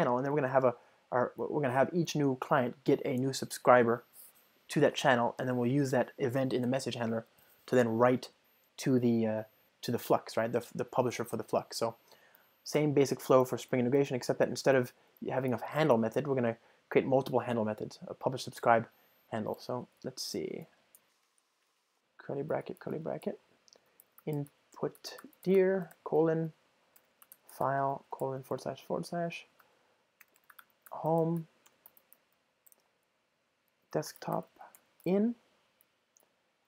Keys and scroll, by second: 12.8 alt+Return, 21.3 Return, 22.4 Return.